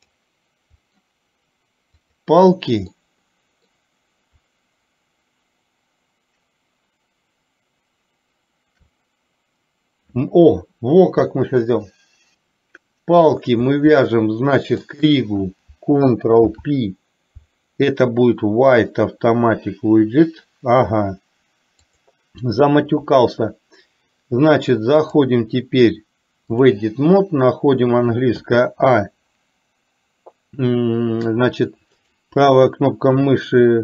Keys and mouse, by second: 0.0 click, 1.0 middle click, 2.2 click, 3.0-3.9 middle drag, 15.0 shift+click, 16.5 ctrl+p, 22.0 click, 25.0-27.0 drag, 32.1-33.8 right drag.